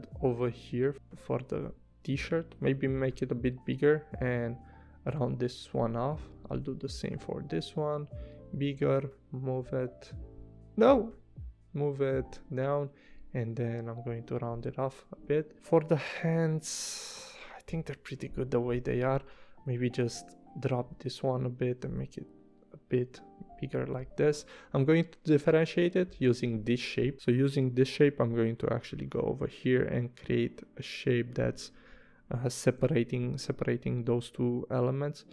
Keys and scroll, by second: 0.9 a, 15.3 v, 18.7 a, 24.6 v, 27.7 p, 31.3 v, 32.8 p.